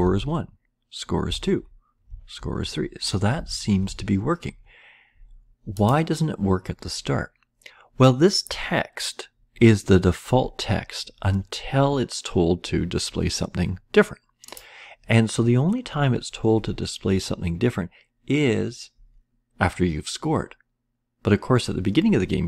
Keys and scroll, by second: 0.0 Left, 1.2 Left, 2.0 Right, 3.3 Down, 3.4 Right.